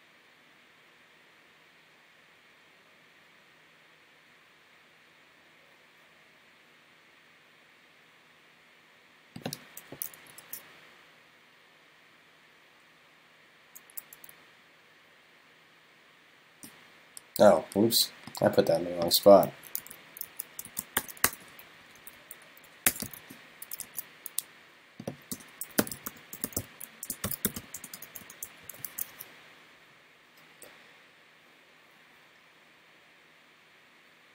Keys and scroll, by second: 19.9 super+x, 20.7 shift+super+Left, 23.1 super+v, 28.9 super+s.